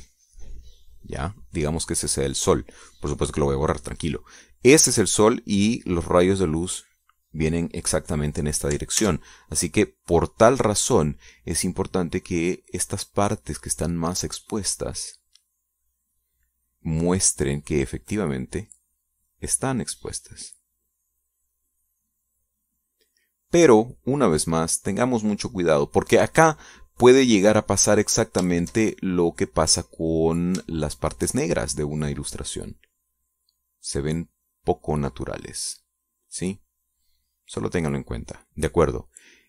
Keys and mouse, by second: 0.2-4.0 drag, 10.5 ctrl+z, 13.7 click, 14.1 click, 14.6-17.2 drag, 17.5 click, 18.6 click, 19.9 click, 20.6-23.6 drag, 23.7-27.9 drag, 28.1-31.4 drag, 32.2 shift+click, 33.1-35.2 shift+drag, 35.6-38.1 drag, 38.4-39.4 middle drag.